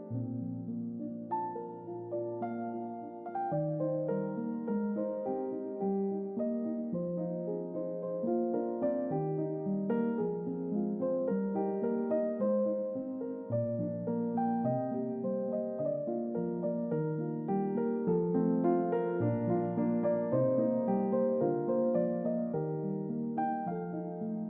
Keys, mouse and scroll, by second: 3.5 click, 4.2 click, 5.5 click, 6.6 click, 9.1 click, 9.9-11.4 drag, 12.0-19.8 drag, 20.4-22.3 drag, 23.2 middle click, 23.2-23.8 scroll down 3, 23.5 middle click, 24.3 middle click, 24.3 scroll down 2.